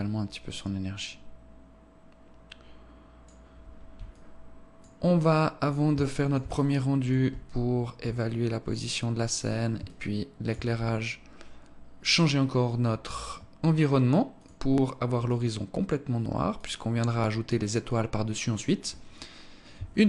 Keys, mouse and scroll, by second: 3.5 alt+click, 4.8 alt+click, 5.5 alt+shift+click, 6.0 alt+shift+click, 6.9-7.4 scroll up 3, 7.7 alt+click, 9.4 alt+shift+click, 11.6 click, 13.9 click, 16.1 click, 19.9 ctrl+s.